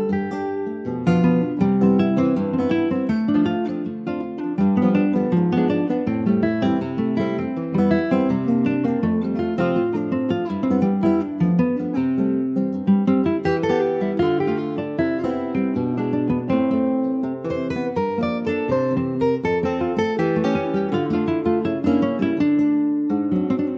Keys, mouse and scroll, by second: 0.3-1.3 shift+scroll up 1, 1.3-4.4 drag, 5.7-6.1 scroll up 2, 6.1 middle click, 7.1 Tab, 7.2 click, 7.5-7.8 scroll down 2, 7.8 middle click, 8.1 ctrl+s, 8.2 click, 10.2 click, 11.1 click, 12.7 click, 13.7 click, 14.9 click, 15.1 right click, 16.0 click, 16.5 click, 17.0 alt+middle click, 17.4 scroll down 1, 18.0 ctrl+s, 18.3 alt+middle click, 18.7-19.0 scroll up 2, 19.0 shift+middle click, 19.3-20.0 scroll up 2, 19.4 Tab, 20.0-21.4 middle drag, 21.4 ctrl+r, 22.7 middle click, 23.4 click.